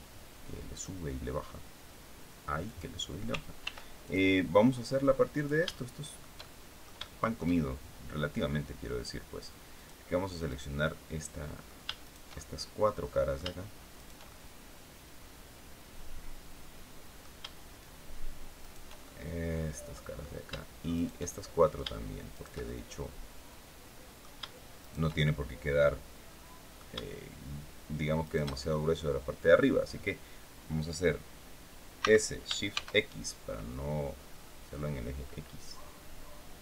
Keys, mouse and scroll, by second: 0.4 click, 2.3 click, 3.3 ctrl+r, 3.7 ctrl+click, 5.0 shift+click, 5.4 shift+middle click, 7.9 scroll up 2, 9.4 click, 10.1 right click, 10.5 middle click, 11.7 shift+right click, 12.0-13.2 shift+middle drag, 13.6 shift+right click, 14.0-17.0 shift+middle drag, 18.3 shift+right click, 18.7-20.0 shift+middle drag, 20.6 shift+right click, 20.9 shift+middle click, 22.0 shift+right click, 22.3-24.0 shift+middle drag, 24.4 shift+right click, 24.8-26.6 shift+middle drag, 27.9 shift+right click, 28.4-29.4 shift+middle drag, 31.6 s, 32.4 shift+x.